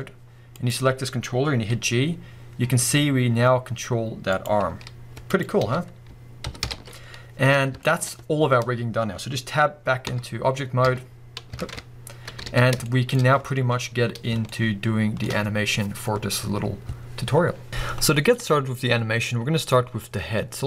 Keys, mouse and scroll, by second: 0.6 click, 1.7 g, 4.5 click, 4.7 r, 5.4 click, 5.6 a, 6.5 alt+g, 6.7 alt+r, 6.8 alt+s, 7.5 scroll down 1, 7.8-17.7 shift+middle drag, 10.1 Tab, 11.6 ctrl+Tab, 12.3 scroll down 1, 12.5 alt+a, 13.2-14.5 scroll up 2, 19.8-20.6 scroll up 1.